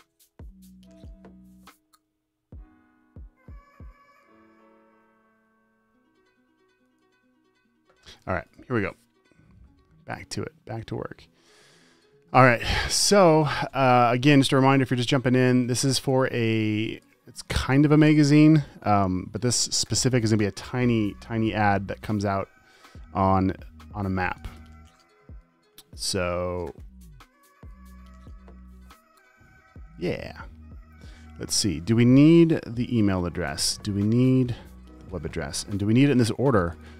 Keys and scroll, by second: 15.9 space, 16.7 space, 17.3 space, 24.9 super+t, 28.5 v, 36.1 t.